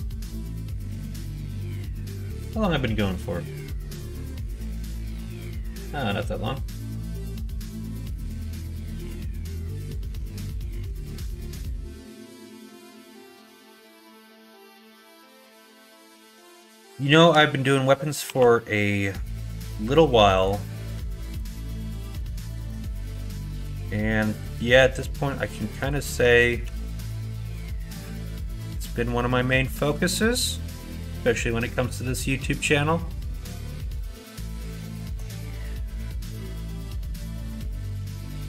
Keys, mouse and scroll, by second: 13.3 shift+middle click, 14.4 shift+middle click, 17.0 alt+click, 18.2 r, 21.3 alt+click, 22.3 shift+middle click, 26.6 g, 34.0 shift+middle click, 34.9 alt+click, 36.2 s.